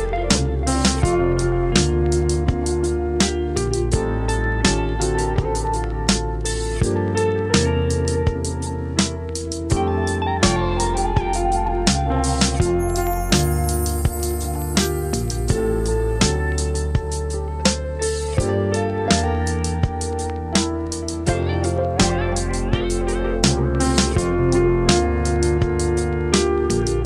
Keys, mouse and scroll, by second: 4.1 scroll up 4, 5.1 ctrl+s, 6.1 click, 7.1-9.6 scroll down 2, 9.6 click, 11.6 click, 13.3 s, 16.8 s, 19.4 ctrl+s, 20.2 s, 22.1 ctrl+s, 23.0 click, 25.2 shift+d, 26.6 g.